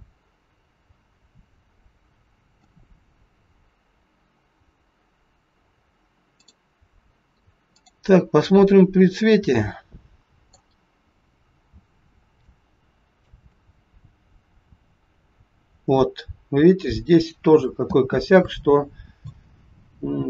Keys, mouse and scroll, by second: 6.5 click, 7.8 click, 8.5 middle click, 10.8 scroll up 2, 12.5 shift+middle click, 17.8 space, 18.5 middle click, 20.1-20.2 scroll up 3.